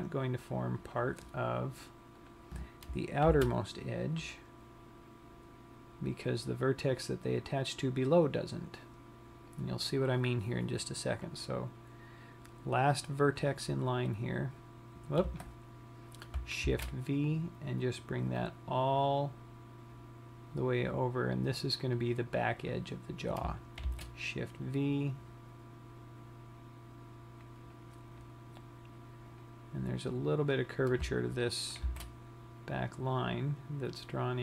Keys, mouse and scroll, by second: 1.5 click, 2.8 click, 3.8 shift+v, 10.8 click, 11.9 click, 14.5 click, 17.3 shift+v, 22.5 click, 23.3 click, 24.5 shift+v, 28.6 click, 29.8 click, 31.3 click, 32.3 shift+v.